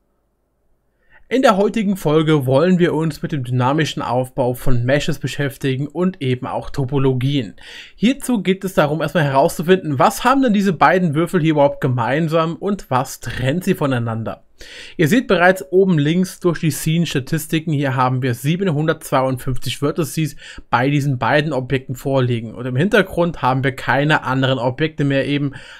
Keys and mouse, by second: 0.9-25.7 right drag, 24.9-25.7 middle drag.